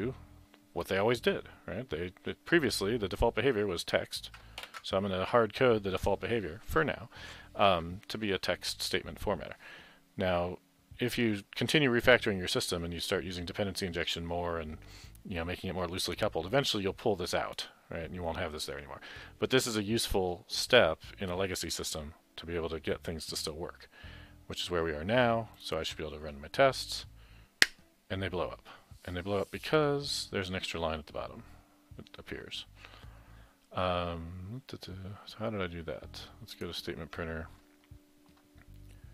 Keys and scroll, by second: 4.6 ctrl+shift+b.